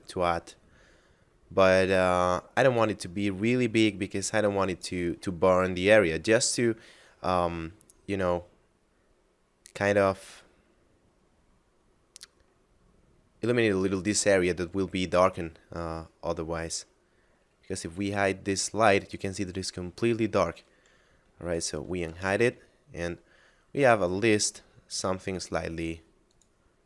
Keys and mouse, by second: 1.1 middle click, 2.8 click, 12.6 middle click, 17.8 h, 21.8 alt+h, 25.2 right click, 26.3 click.